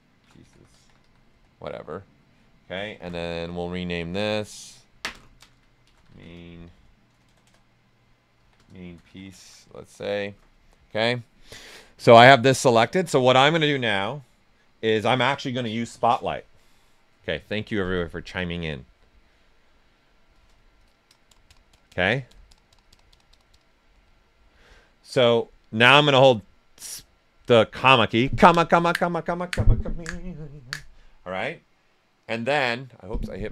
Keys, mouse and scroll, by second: 0.0-1.5 typing, 4.1 click, 5.6-6.6 typing, 8.1-9.9 typing, 11.6 click, 12.9-25.7 alt+right drag, 25.7 ,.